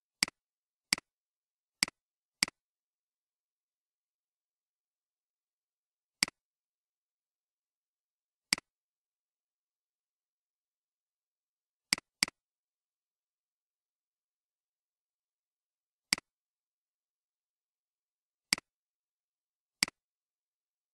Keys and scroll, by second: 7.1-8.0 typing, 9.4-10.2 typing, 10.8 Return, 12.5-13.7 typing.